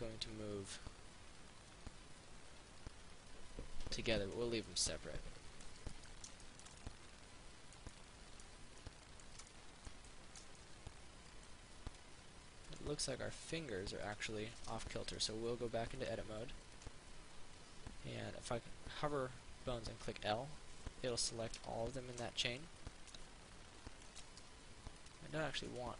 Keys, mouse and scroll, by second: 4.5 right click, 4.9 middle click, 12.9 right click, 15.3 Tab, 25.3 right click.